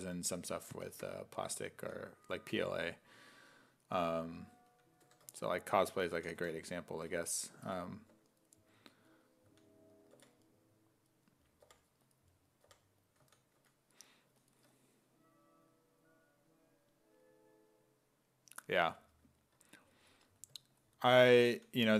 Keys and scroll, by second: 1.8 s, 2.4 2, 5.1 2, 6.2 s, 8.1 2, 9.5 s, 10.2 5, 11.6 4, 12.7 4, 13.2 s, 13.6 2, 21.5 s, 21.9 5.